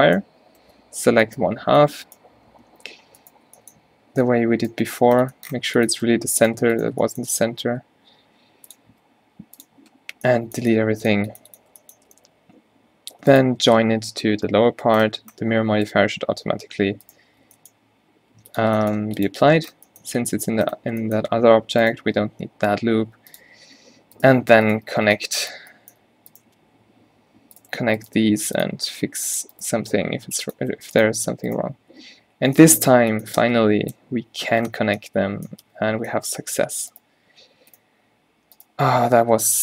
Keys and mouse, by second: 7.6 ctrl+e, 9.0 x, 12.3 Tab, 14.5 ctrl+j, 16.2 Tab, 17.7 g, 18.9 g, 22.2 x, 25.3-25.6 middle drag, 26.7 g, 28.3 g, 29.2 g, 29.8 g, 35.9 q.